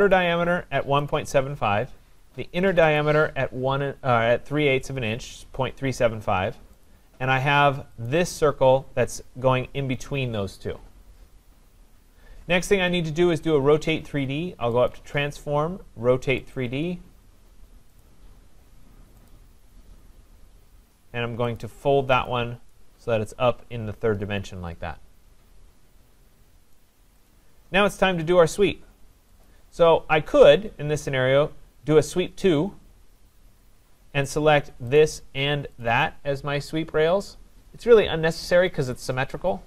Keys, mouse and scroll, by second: 0.1 click, 1.1 click, 3.0 click, 6.9 click, 8.1 click, 14.9 click, 16.6 click, 18.0 click, 19.3 click, 21.6 click, 22.3 click, 26.8 right click, 27.3 click, 29.5 right click, 29.5 click, 34.4 click, 35.0 click, 35.8 click.